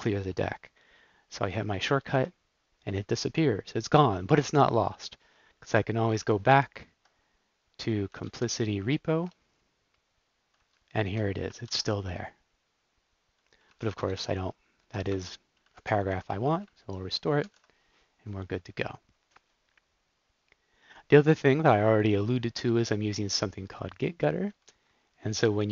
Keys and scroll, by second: 2.1 alt+r, 6.5 super+o, 7.9-9.1 typing, 10.7 Down, 10.8 Down, 10.9 Down, 11.5 alt+p, 13.7 Down, 14.1 shift+Up, 15.0 BackSpace, 15.7 super+s, 16.1 super+w, 16.8 super+z, 17.4 super+s, 24.1 Down, 24.5 Up.